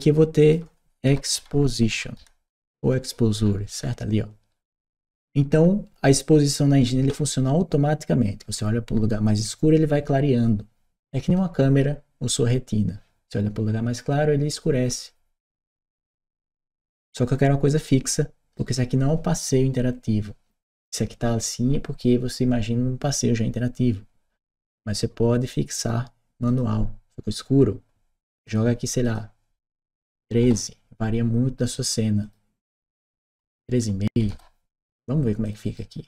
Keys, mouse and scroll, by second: 0.2 click, 3.2-6.6 middle drag, 6.6-18.4 right drag, 24.5 click, 25.2 click, 26.3 click, 28.3 click, 28.8 click, 29.7 1, 30.0 2, 30.3 Return, 32.0 click, 33.2 BackSpace, 35.2 Return, 35.2 click, 35.4 right click.